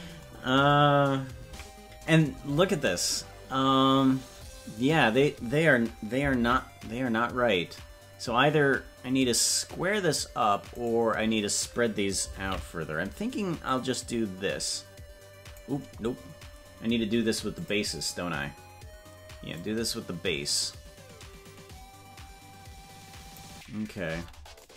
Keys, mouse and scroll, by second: 1.5 KP_Decimal, 6.4 ctrl+l, 12.4 ctrl+l, 13.7-15.5 drag, 16.8 scroll up 1, 17.6 click, 17.6 scroll up 7, 19.5-23.3 drag, 24.2 Tab.